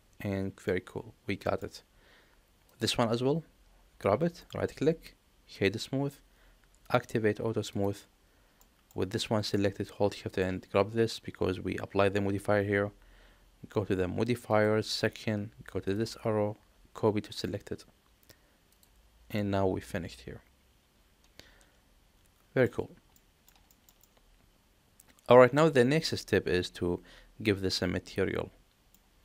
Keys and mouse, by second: 0.5-1.5 middle drag, 2.5 click, 4.4-5.6 right drag, 6.7 click, 7.6 click, 8.5 middle click, 10.2 shift+click, 14.4 click, 15.9-17.3 drag, 18.6 click, 19.3-22.5 middle drag, 23.0-23.4 middle drag, 23.6 shift+middle drag, 23.9-28.7 middle drag.